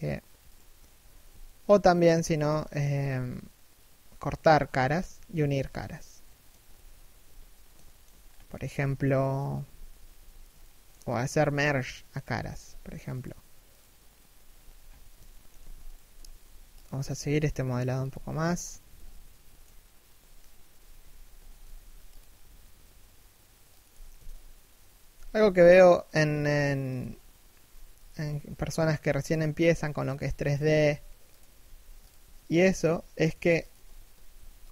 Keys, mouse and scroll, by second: 0.6 a, 1.0 alt+shift+middle click, 1.8 alt+right click, 2.2 alt+shift+middle click, 4.8 a, 5.6 middle click, 6.3 3, 6.8 1, 7.4 alt+shift+middle click, 7.8-8.8 scroll up 1, 9.3 z, 10.2 shift+middle click, 11.0 z, 12.8 right click, 14.4-14.8 scroll down 1, 14.8 alt+shift+middle click, 15.5 alt+right click, 15.8 z, 18.2-18.5 scroll up 1, 18.5 z, 18.7 middle click, 20.3 3, 20.7 2, 20.9 1, 21.2 z, 25.4 alt+right click, 25.9 g, 28.9 alt+right click, 29.3 g, 30.1 alt+right click, 30.4 g, 32.1 alt+right click, 32.3 s.